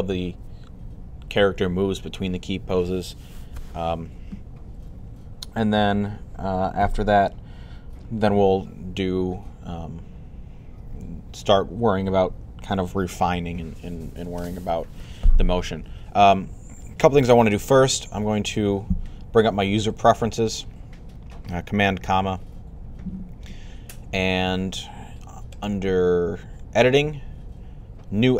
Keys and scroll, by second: 18.2 super+,.